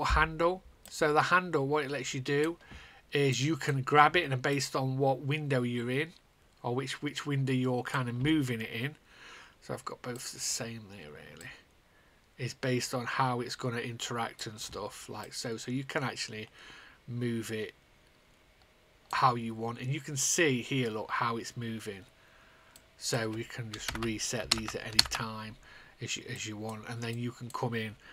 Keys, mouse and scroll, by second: 1.4 click, 2.6 click, 3.2 click, 4.4 click, 5.0 click, 6.0 click, 11.3 click, 12.3 click, 23.6 click, 23.7 KP_0, 24.3 KP_0, 25.0 Return, 26.3 click, 26.9 click.